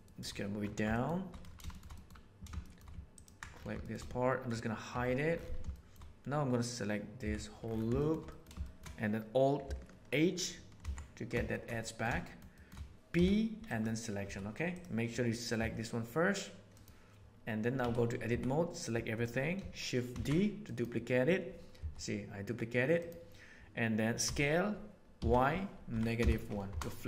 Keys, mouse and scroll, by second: 0.8 shift+middle click, 1.6 shift+middle click, 1.9 middle click, 2.6 shift+middle click, 3.1 ctrl+middle click, 3.8 shift+middle click, 5.4 h, 5.7 middle click, 7.2 l, 8.0 middle click, 8.2 middle click, 8.6 middle click, 10.7 alt+h, 11.4 middle click, 11.8 middle click, 12.4 click, 12.9 ctrl+z, 13.2 p, 14.2 Tab, 15.5 g, 17.8 Tab, 18.2 a, 20.0 shift+d, 21.7 g, 24.2 s.